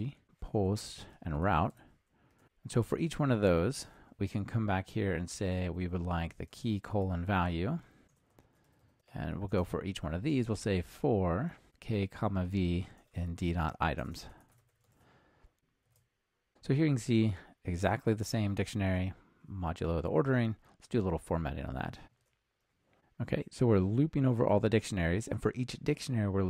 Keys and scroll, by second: 15.8 ctrl+r, 22.2 alt+super+l.